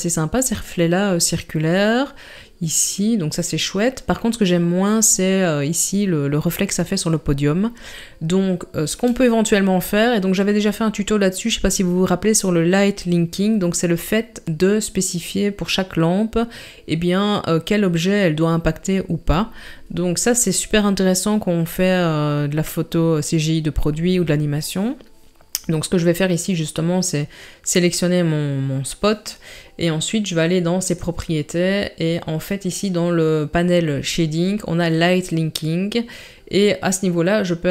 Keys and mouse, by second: 30.8 click.